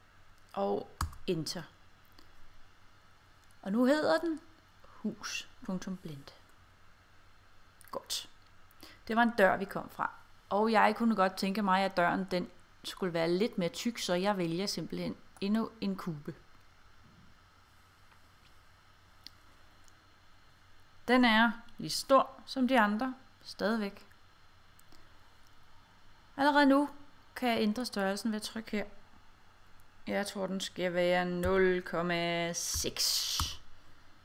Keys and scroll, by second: 1.1 Return, 31.5 ., 32.8 6, 33.5 Return.